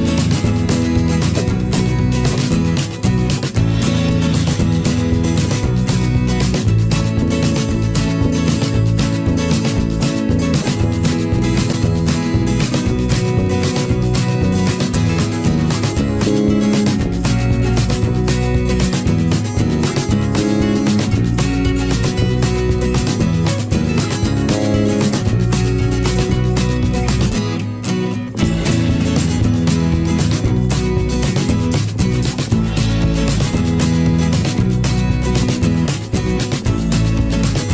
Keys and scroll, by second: 9.0 ctrl+i, 9.3 ctrl+alt+z.